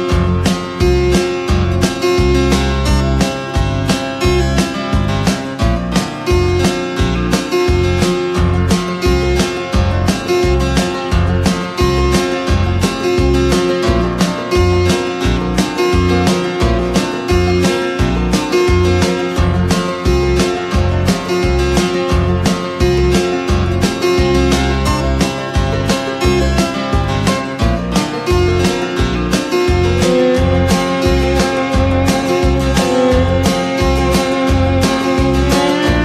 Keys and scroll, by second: 10.0 ctrl+z, 11.3 ctrl+z, 34.2 ctrl+[.